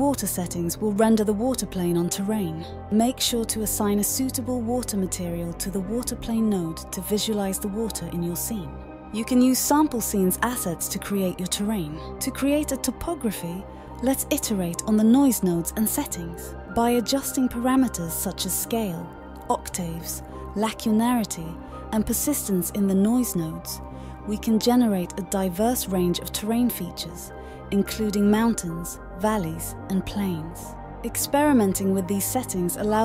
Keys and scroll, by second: 4.8 ctrl+c, 6.4 ctrl+v, 10.0 d, 10.9 d, 11.8 q, 12.1 q, 27.3-28.1 typing.